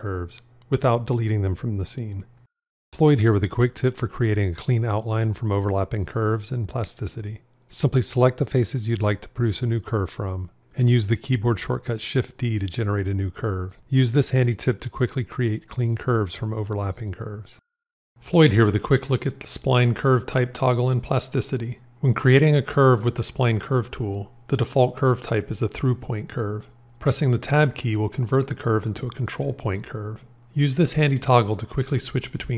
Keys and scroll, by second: 10.8 shift+d, 27.7 Tab, 32.0 Tab.